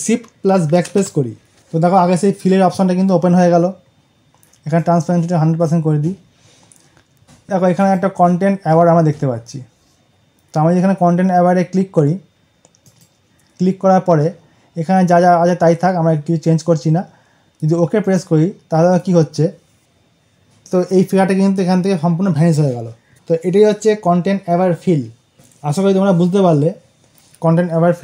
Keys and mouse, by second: 0.6 shift+Num_Lock, 4.7-7.5 drag, 7.6 click, 12.7 click, 17.9 click, 23.1 ctrl+d.